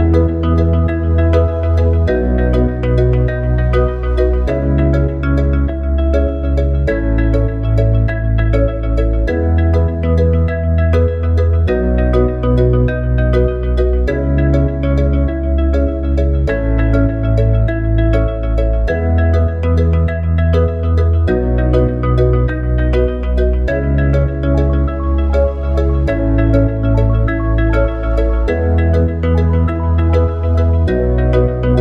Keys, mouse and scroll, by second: 0.4 r, 7.4 click, 9.2 shift+click, 9.7 click, 10.7 click, 11.6 click, 12.4 click, 12.9 click, 13.4 click, 13.8 click, 14.6 click, 19.6 ctrl+v, 21.3 click, 26.4 click, 30.0 click, 31.2 r.